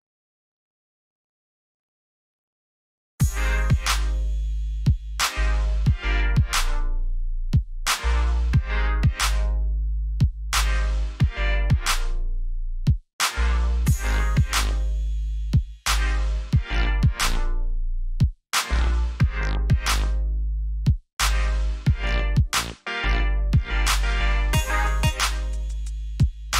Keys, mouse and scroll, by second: 1.5-2.9 typing, 4.3 click, 8.5-9.3 scroll down 1, 9.3 click, 10.2-10.7 alt+scroll down 1, 10.7 alt+scroll up 1, 11.5-13.6 scroll up 1, 13.6 click, 14.8 alt+scroll up 1, 15.6 alt+scroll down 1, 16.5 click, 26.3 right click.